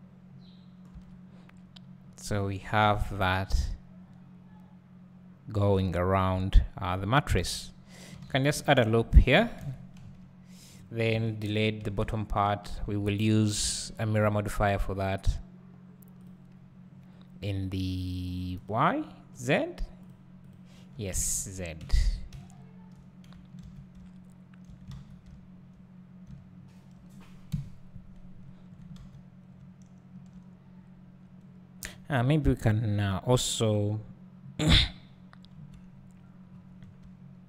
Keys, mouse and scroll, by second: 0.9 Tab, 2.0 scroll down 1, 2.3 `, 3.2 scroll up 1, 3.5 `, 7.4 Tab, 8.2 ctrl+r, 9.6 KP_1, 10.7 click, 11.1 alt+a, 11.9 n, 12.0 b, 13.8 x, 16.2-21.3 drag, 22.4 `, 24.9 alt+a, 25.3 `, 25.9-26.3 scroll down 1, 26.3 `, 27.5 KP_Divide, 28.3-29.1 scroll down 1, 29.5-30.2 scroll up 1, 31.1-31.9 scroll up 1, 32.3 Tab, 34.7 click, 36.1 KP_Decimal, 36.5 scroll down 1.